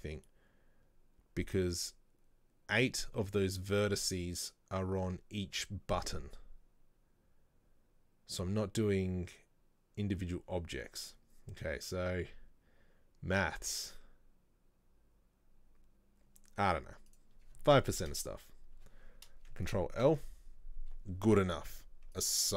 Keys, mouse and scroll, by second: 17.2-20.2 drag, 20.2 ctrl+l, 22.3 click.